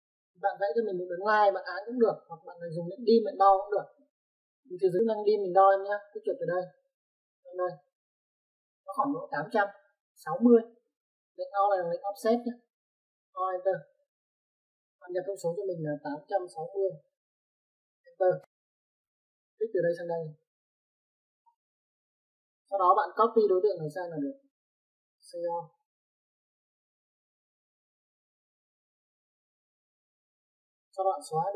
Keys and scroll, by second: 3.1 Escape, 14.2 space, 16.3 typing, 17.6-18.6 typing, 22.4 space, 25.4-26.5 typing, 30.5 space.